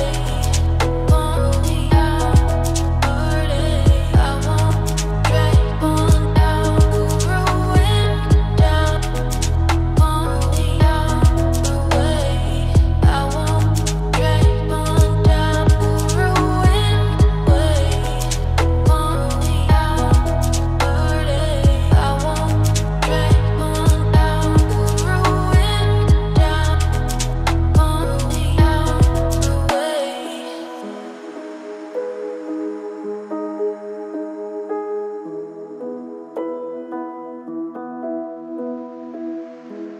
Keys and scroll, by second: 21.7 ctrl+space.